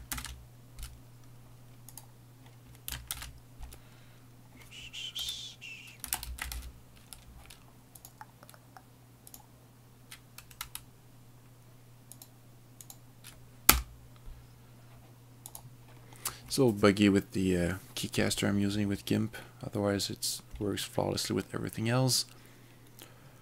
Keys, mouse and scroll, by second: 0.1 ctrl+shift+e, 2.0 click, 3.1 ctrl+shift+e, 5.8-7.0 typing, 8.1 click, 12.2 click, 13.7 Return, 15.6 click.